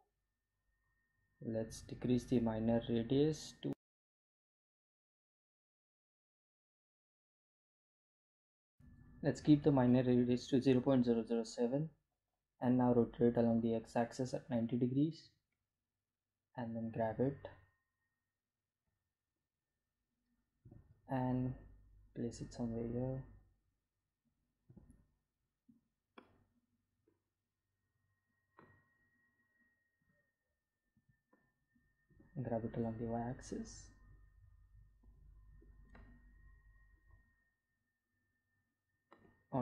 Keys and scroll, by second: 12.4 r, 13.0 x, 13.4 9, 13.8 0, 14.4 Return, 15.2 g, 15.5 z, 19.8 End, 21.2 g, 21.3 x, 25.8 g, 25.9 z, 31.7 Home, 32.7 g, 34.0 y, 37.8 Delete.